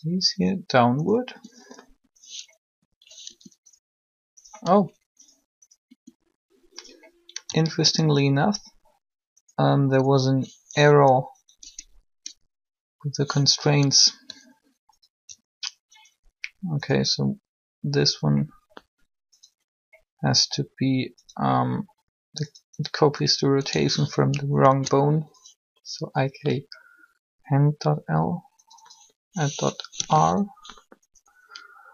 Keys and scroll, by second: 1.2 r, 3.2 r, 5.8 r, 11.3 n, 24.5 shift+h.